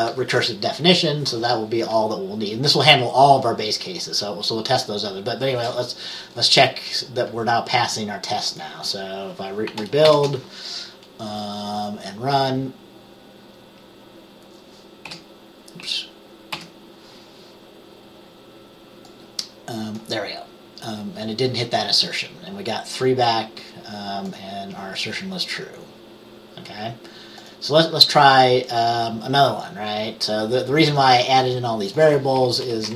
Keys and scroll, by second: 10.2 ctrl+b, 15.2 F6, 16.7 F5, 32.8 Return.